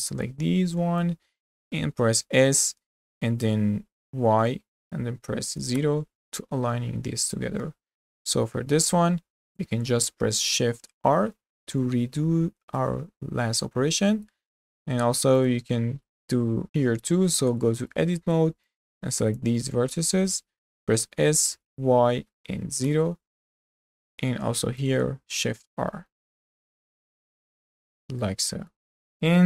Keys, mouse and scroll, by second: 2.2 s, 8.3 click, 11.1 shift+r, 14.4 scroll down 2, 14.5 click, 15.0 Tab, 15.4 click, 16.1-17.6 middle drag, 17.6 Tab, 17.9 middle click, 18.7 drag, 19.8-21.1 middle drag, 21.1 s, 23.9-24.3 middle drag, 24.3 click, 25.4 shift+r, 25.8 scroll down 2, 26.0 middle click, 26.2 Tab, 26.9 z, 27.4-27.9 middle drag, 27.9 click, 28.2-29.4 middle drag.